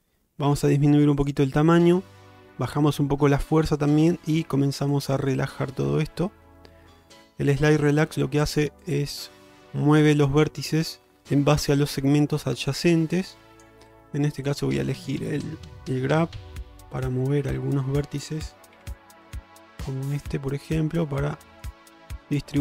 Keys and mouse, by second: 0.6 f, 3.8-4.8 shift+drag, 5.0-8.7 shift+drag, 9.0-13.7 shift+drag, 14.5 click, 17.1-18.1 drag, 18.8 f, 19.7 click, 20.7 click, 22.3 click.